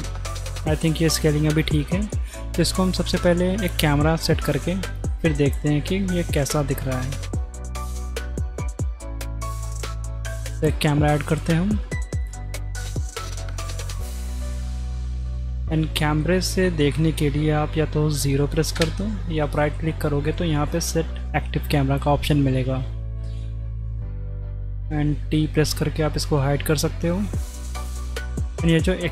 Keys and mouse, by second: 0.5-1.3 middle drag, 2.2 middle drag, 3.2-3.9 drag, 4.5-5.0 drag, 6.2-6.6 drag, 8.1 z, 8.3 click, 8.7 click, 9.0 click, 9.8 n, 10.0 shift+a, 13.2-14.3 drag, 14.3 g, 16.2 drag, 18.7 KP_0, 19.7-22.7 drag, 25.7 t.